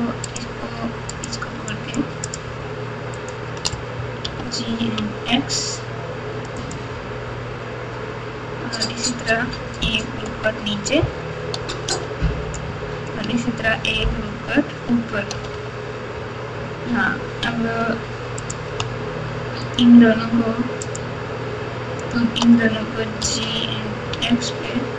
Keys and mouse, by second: 1.2 shift+click, 1.8 shift+click, 3.1 shift+click, 4.2 g, 6.6-7.3 x, 10.2 ctrl+r, 14.1 ctrl+r, 18.3 click, 19.7 shift+click, 20.8 shift+click, 23.2 g.